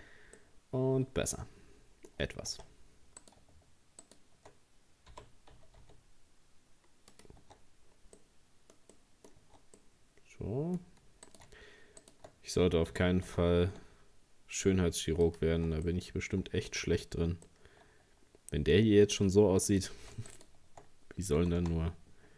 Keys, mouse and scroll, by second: 0.0 scroll down 2, 0.4-2.2 middle drag, 2.2-2.5 scroll up 1, 2.5 Tab, 3.2 right click, 4.0 shift+right click, 5.1 g, 7.4 Tab, 7.8-8.2 scroll down 2, 8.2 middle click, 8.8 scroll up 1, 9.0 middle click, 9.4 Tab, 9.8-11.3 middle drag, 11.3 right click, 12.0 shift+right click, 12.9 g, 15.6 Tab, 15.9 middle click, 16.8 Tab, 17.5-18.9 middle drag, 18.9 scroll up 2, 19.7 right click, 20.3 shift+right click, 21.4 g.